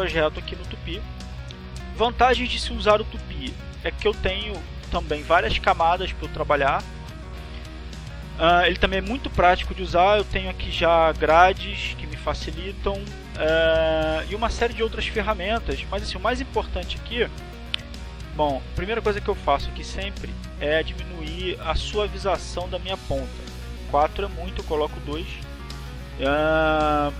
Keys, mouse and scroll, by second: 0.2 click, 2.8 click, 4.9 click, 15.7 click, 16.7 click, 25.1 click.